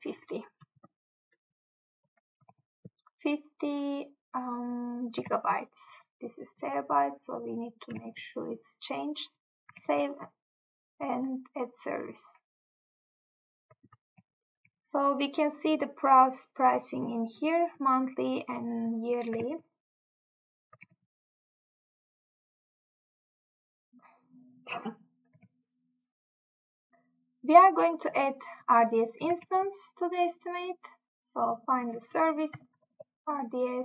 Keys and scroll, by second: 2.5 Tab, 5.3 Tab, 8.0 Tab, 9.8 Tab, 14.3 Tab, 21.0 Tab, 25.4 Tab, 29.4 Tab.